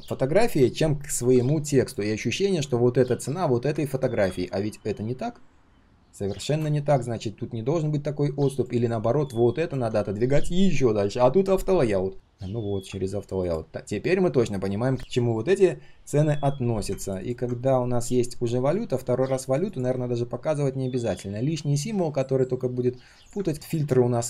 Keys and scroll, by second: 2.0 ctrl+z, 2.4 ctrl+z.